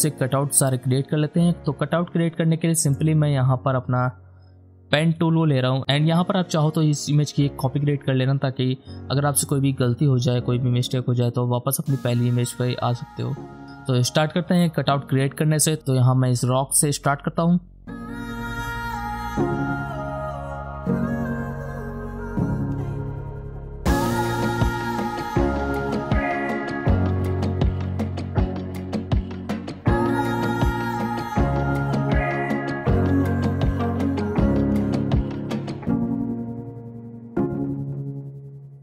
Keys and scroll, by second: 16.1 alt+space, 16.3 alt+space, 16.6 alt+space, 17.4 alt+space, 17.5 ctrl+z, 18.2 space, 18.4 space, 18.7 space, 18.8 space, 19.0 ctrl+z, 19.5 alt+space, 20.0 alt+space, 20.3 ctrl+z, 20.5 ctrl+z, 20.7 alt+space, 20.8 alt+space, 21.8 space, 21.9 space, 22.4 alt+space, 24.1 alt+space, 24.3 ctrl+z, 24.5 Return, 24.5-27.9 typing, 25.5 ctrl+z, 28.3 ctrl+l, 29.2 ctrl+Return, 30.4 alt+space, 30.6 alt+space, 30.9 ctrl+alt+d, 31.1-32.9 typing, 31.2 alt+space, 32.2 ctrl+alt+z, 32.4 ctrl+Return, 33.3 alt+p, 33.5 alt+space, 34.4-36.6 typing, 34.6 ctrl+alt+z, 38.0 alt+space.